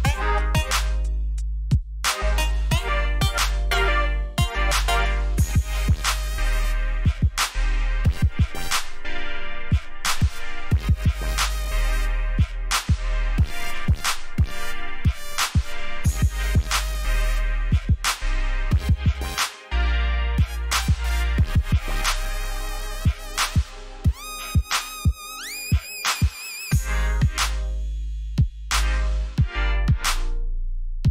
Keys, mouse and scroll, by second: 1.4 alt+scroll up 1, 2.0 c, 3.1 click, 6.8 alt+scroll up 1, 7.4 alt+scroll down 1, 8.3-8.7 alt+scroll down 1, 9.2 ctrl+alt+shift+e, 11.3 alt+scroll up 1, 12.4 click, 13.5 shift+click, 15.2 ctrl+j, 19.7 alt+scroll down 1, 20.4 alt+scroll up 1, 21.0 alt+scroll up 2, 21.9-22.5 scroll down 2, 24.2 v, 25.0-25.4 alt+scroll down 1, 25.4 alt+scroll up 1, 25.9 alt+scroll up 1, 26.5-27.0 alt+scroll down 2, 28.4 click.